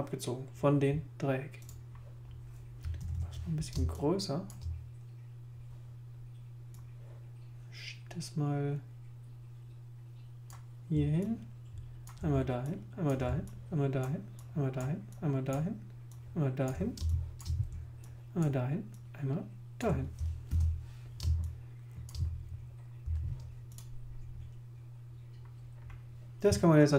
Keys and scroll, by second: 3.0 super++, 3.7 super+space, 17.0 alt+space, 20.5 alt+super+i, 21.2 super+space, 23.0 v.